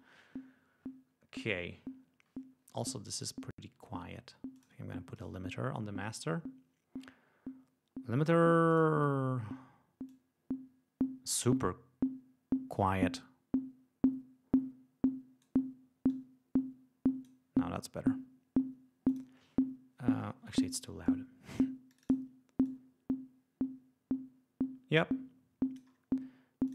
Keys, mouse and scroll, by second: 4.4 click, 5.0 right click, 8.6 click, 10.0-15.5 drag, 16.0 click, 19.0 click, 20.9-21.7 drag, 21.8 click, 22.5-25.9 drag, 26.6 click.